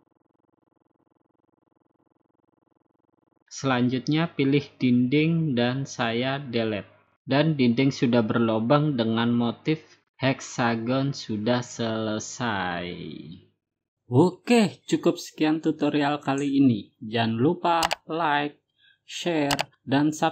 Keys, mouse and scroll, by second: 0.0-0.8 scroll up 6, 0.8 scroll, 1.0 middle click, 1.4 middle click, 2.7 click, 3.2 Escape, 4.0 Escape, 5.4 click, 6.9 Delete, 9.9 click, 10.2 scroll down 1, 10.3-10.8 scroll up 4, 10.8-11.4 scroll down 3, 11.8 click, 12.1-12.8 scroll up 6, 17.9 click.